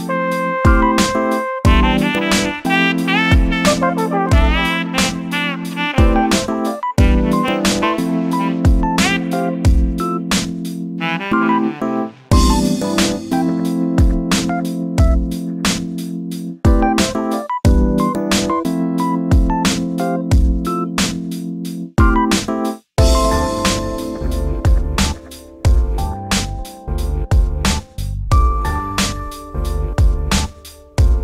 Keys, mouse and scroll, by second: 0.0 click, 0.5 click, 1.0 3, 1.2 click, 1.7 shift+click, 2.2 KP_7, 2.5 alt+z, 2.8-3.7 scroll down 2, 3.7 click, 4.0 shift+middle click, 4.6-5.3 scroll up 4, 5.3-6.5 middle drag, 6.5 e, 9.9 ctrl+b, 12.2 Tab, 12.5-13.6 middle drag, 13.6 scroll down 7, 13.9 shift+middle drag, 14.2 scroll up 4, 14.3 middle drag, 14.8 scroll up 2, 14.8-15.4 shift+middle drag, 15.4 click, 15.5 Tab, 16.0 click, 16.2 Tab, 16.7 3, 16.9 click, 17.4 shift+click, 17.6 scroll up 1, 17.6-19.0 middle drag, 19.0-19.3 scroll up 2, 19.3 shift+middle click, 20.2 e, 22.2 s, 25.4 Tab, 26.7-27.6 scroll down 10, 27.0 shift+middle click, 27.6-28.3 shift+middle drag, 28.3 alt+z, 28.7 alt+z, 29.0 middle click, 29.6 KP_7, 30.0-30.3 scroll down 2, 30.3 shift+middle click, 30.6-31.1 scroll up 2, 30.8 Tab, 31.1 middle click.